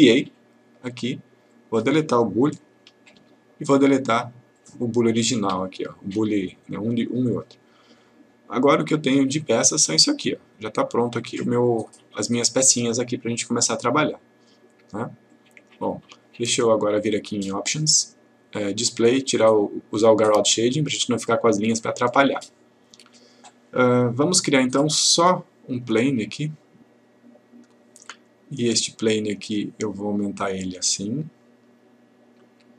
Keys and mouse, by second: 3.2 Delete, 4.6 click, 5.5 Delete, 9.3 click, 14.2 click, 17.7 click, 20.6 click, 26.3-26.9 click, 29.5 click.